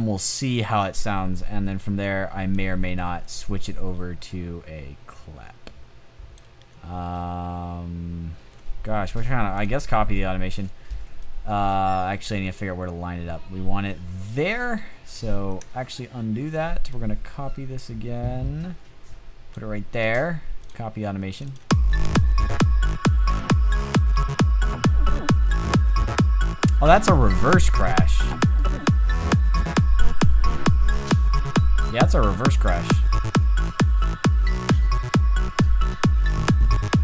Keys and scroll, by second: 14.8 super+z, 23.6 a, 32.2 a.